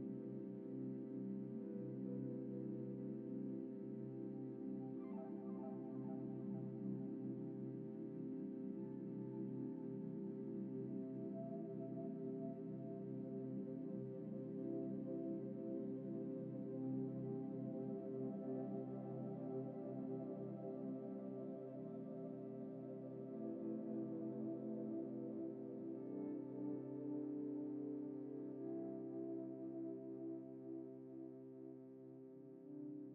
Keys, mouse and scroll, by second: 1.1 typing, 2.5 typing, 8.5 double click, 8.9 scroll down 1, 9.4 double click, 19.1 middle click, 20.8 shift+middle click, 31.1 middle click, 32.4 ctrl+z, 32.5 ctrl+z.